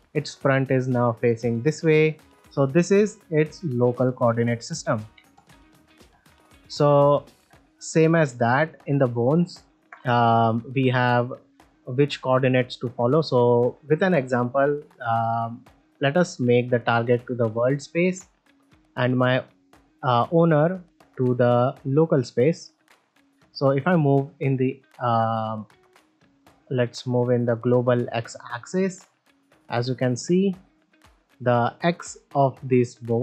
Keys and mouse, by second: 0.1-0.4 middle drag, 2.1-2.8 middle drag, 3.2 middle drag, 4.6 middle drag, 5.1 x, 5.8 shift+middle click, 6.2-6.5 ctrl+middle drag, 6.8 shift+middle click, 7.1-7.4 shift+middle drag, 9.0 ctrl+Tab, 9.8 ctrl+shift+middle drag, 10.0 ctrl+middle drag, 10.3 middle drag, 13.1 middle drag, 13.9 shift+middle drag, 14.3 z, 14.9 shift+middle click, 19.1-22.0 drag, 22.8 shift+middle drag, 23.1 ctrl+middle drag, 23.9 click, 25.6 click, 26.0-26.8 drag, 27.3 middle click, 30.2-31.7 right drag.